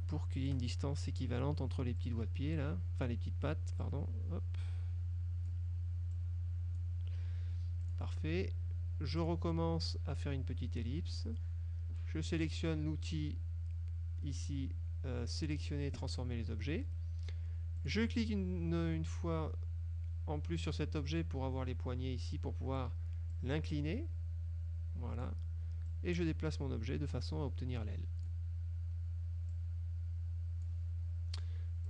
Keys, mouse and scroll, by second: 0.7 click, 2.1 click, 2.7 click, 3.9-5.8 drag, 6.2 click, 8.0 click, 9.3 click, 10.0-11.4 drag, 16.1 click, 17.9 click, 23.4-25.5 drag, 26.0-28.6 drag, 29.6-31.0 drag.